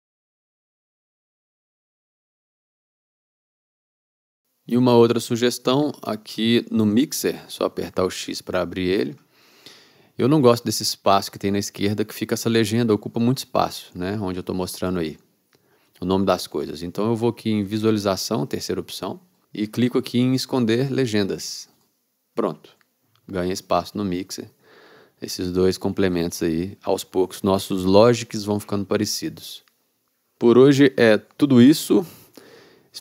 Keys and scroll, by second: 4.8 x, 6.8 x, 8.3 x, 27.2 x.